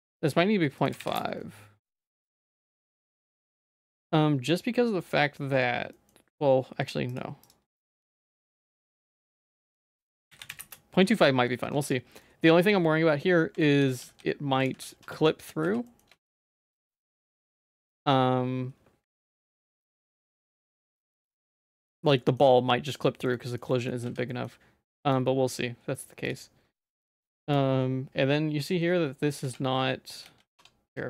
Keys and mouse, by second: 0.9 click, 2.7 middle click, 4.1 middle click, 5.2 middle click, 6.0 middle click, 7.1 click, 7.5-10.7 drag, 11.2 middle click, 11.8 Tab, 12.3 shift+middle click, 12.7 middle click, 13.6 ctrl+x, 14.0 ctrl+z, 14.8 ctrl+x, 15.1 Tab, 15.5 click, 15.7 h, 15.9 middle click, 16.2 shift+middle click, 16.7 click, 16.8 Tab, 19.2 click, 19.5 ctrl+b, 20.7 ctrl+b, 22.2 middle click, 23.1 middle click, 23.4 middle click, 23.8 shift+middle click, 24.1 z, 24.3 middle click, 25.1 click, 26.9 middle click, 29.5 z, 30.3 z, 30.6 Tab.